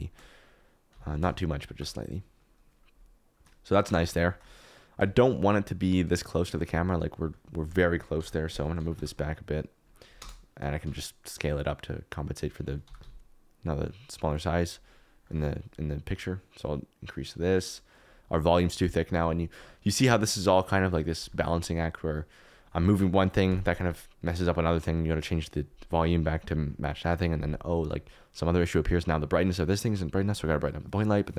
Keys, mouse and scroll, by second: 0.9 s, 1.1 z, 5.5 shift+click, 8.1 KP_3, 8.7 g, 8.9 y, 10.2 KP_0, 10.8 s, 12.8 g, 13.0 z, 15.4 click, 16.2-17.9 drag, 19.9 click, 20.6 click.